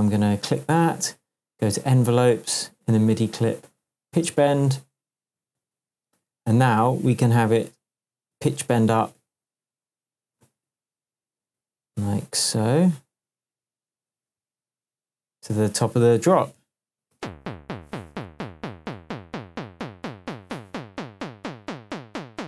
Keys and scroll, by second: 17.1 space, 18.0 shift+space, 18.1 shift+Tab.